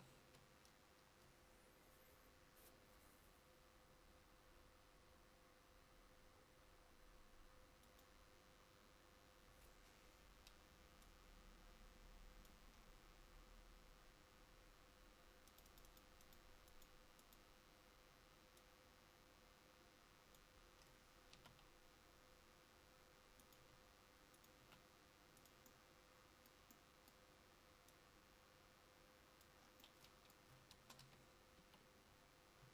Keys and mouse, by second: 24.7 r, 31.1 KP_1, 31.7 KP_3.